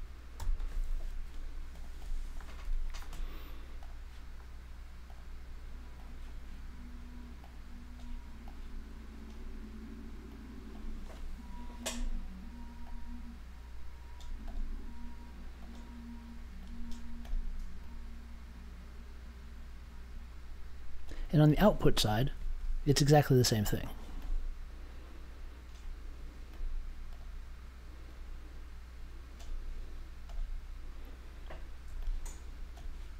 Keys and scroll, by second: 0.3 super+j.